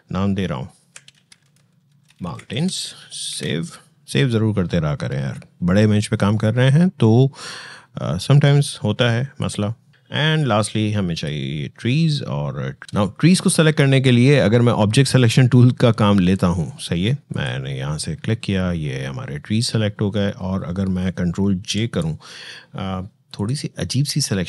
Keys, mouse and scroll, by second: 0.7 m, 2.4 Return, 3.1 ctrl+s, 9.2-12.8 drag, 12.8 ctrl+d, 17.1 click, 21.2 click, 21.4 ctrl+j, 23.1 click.